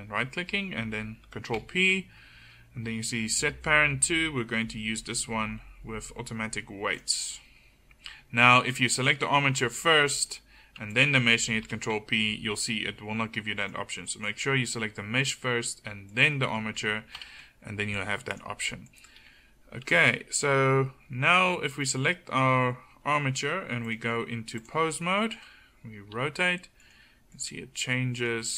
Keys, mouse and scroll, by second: 1.6 ctrl+p, 8.1-9.0 middle drag, 9.0-10.9 drag, 11.7 ctrl+p, 16.1 middle click, 17.2 ctrl+p, 21.4-23.1 right drag, 25.4 click, 25.4 right click, 26.2 r, 27.3 click, 27.3 right click.